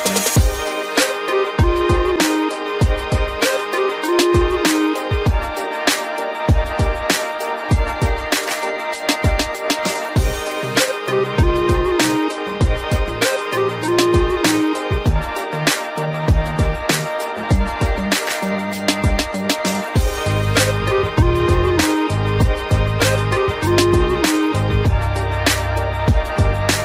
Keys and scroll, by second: 0.2 ctrl+alt+shift+e, 1.5 ctrl+0, 5.7 ctrl+alt+z, 15.7 ctrl+alt+z.